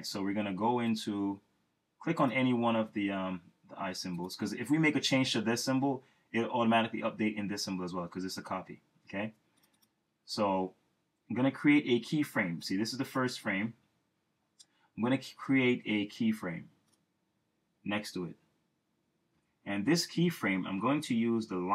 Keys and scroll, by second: 19.3 F6.